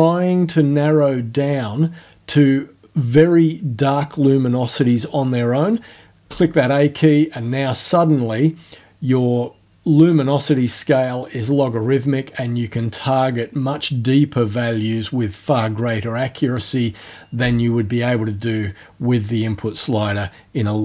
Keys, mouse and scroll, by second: 6.3 a, 11.8-14.7 drag, 17.4 a.